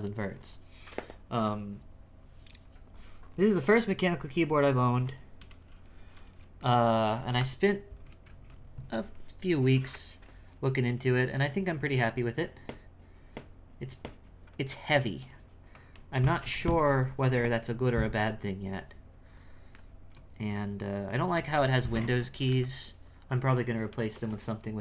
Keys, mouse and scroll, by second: 5.2-8.2 scroll up 3.